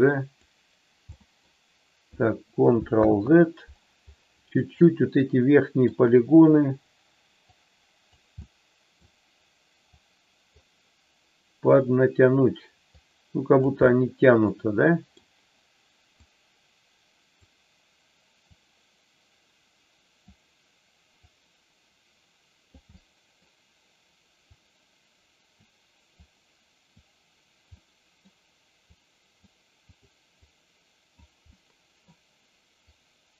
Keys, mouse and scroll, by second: 1.1 middle click, 2.9 ctrl+z, 4.6-5.8 middle drag, 7.4 click, 8.5 middle click, 9.9 click, 11.7 click, 12.8 click, 13.8-15.1 middle drag, 16.2-17.4 drag, 18.4-20.2 drag, 21.2-22.8 drag, 22.9 middle click, 24.5-25.6 drag, 26.1 click, 27.7 middle click, 29.0 click, 29.8 click, 30.4 click, 31.5 middle click, 32.8 click.